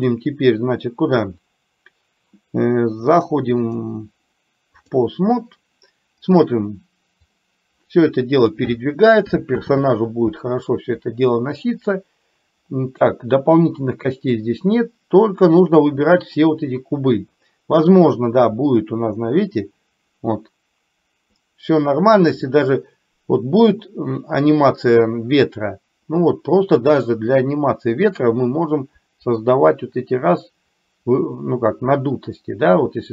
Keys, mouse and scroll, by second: 0.0-1.5 drag, 3.1 click, 3.9-5.0 drag, 6.2 click, 7.4-8.6 drag, 9.6 ctrl+z, 11.5 middle click, 14.5-15.7 drag, 18.0-33.1 drag.